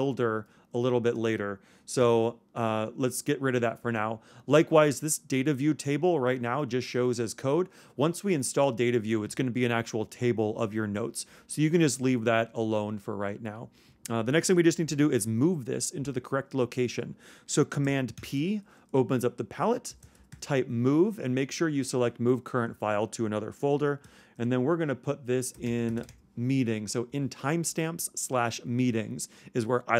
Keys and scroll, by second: 18.2 super+p.